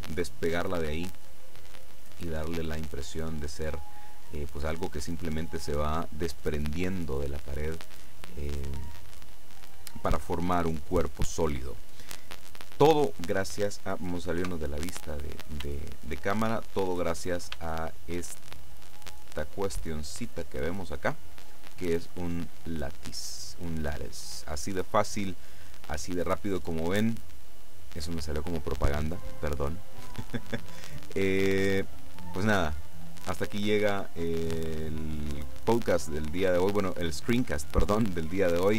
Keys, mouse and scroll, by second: 14.5 KP_0, 15.8-16.9 shift+middle drag, 17.6-18.7 shift+middle drag, 18.8 right click.